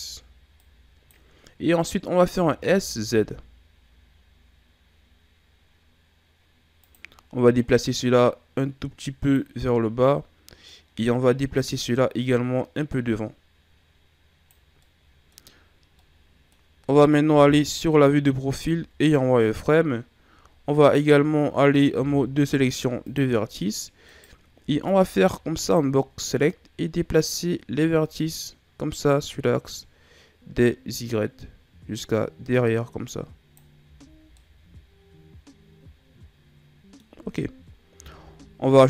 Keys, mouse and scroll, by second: 0.5 click, 2.3 s, 7.7 click, 9.6 scroll up 1, 9.6-11.5 middle drag, 11.5 click, 14.7 middle click, 15.5-15.9 scroll up 1, 15.9-17.3 middle drag, 17.3 KP_3, 18.6 z, 21.8 ctrl+Tab, 24.0 right click, 24.5 b, 27.0 click, 33.7 z, 34.0 scroll down 2, 34.3-37.1 middle drag, 37.1-37.9 scroll up 2, 37.9 Tab, 38.6-38.8 middle drag.